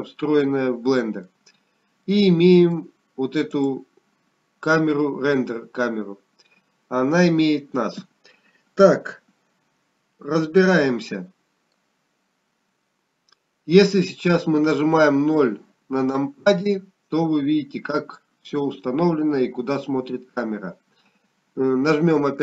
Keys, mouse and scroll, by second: 5.0 middle click, 5.0-7.3 scroll down 2, 7.3 click, 12.3 middle click, 18.4-18.9 scroll down 1, 18.9 KP_0.